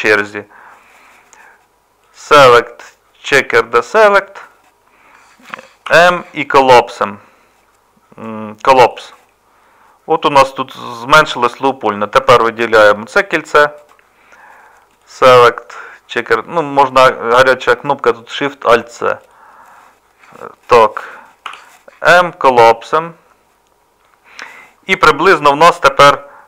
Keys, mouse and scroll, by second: 5.9 m, 21.5 m.